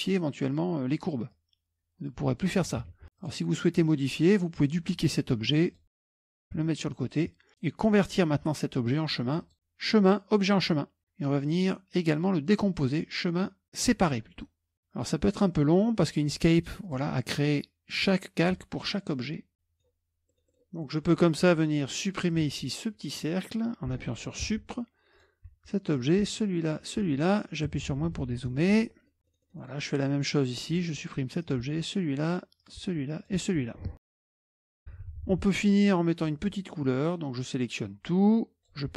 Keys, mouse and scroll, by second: 1.3-2.8 drag, 2.8 ctrl+z, 3.2 click, 5.7 click, 6.4 ctrl+click, 7.5 click, 9.4 click, 10.5 click, 12.0 click, 14.0 click, 16.9 click, 19.5 middle click, 19.5-20.1 scroll down 3, 20.4-22.2 middle drag, 22.3 click, 24.6 Delete, 25.2 click, 25.8 Delete, 26.0 click, 26.3 Delete, 26.7 click, 26.9 Delete, 27.7 KP_Subtract, 27.9 KP_Subtract, 28.2 KP_Subtract, 28.4 KP_Subtract, 28.5 KP_Subtract, 29.1-30.1 scroll up 1, 30.7 click, 31.1 Delete, 31.5 click, 31.7 Delete, 32.6 click, 32.8 Delete, 33.2 click, 33.4 Delete, 34.5 KP_Subtract, 34.6 KP_Subtract, 34.9 KP_Subtract, 35.1 KP_Subtract, 35.2 KP_Subtract, 35.4 KP_Subtract, 36.0-37.0 scroll up 2, 36.0 middle click, 37.0 middle click, 37.4-38.9 drag.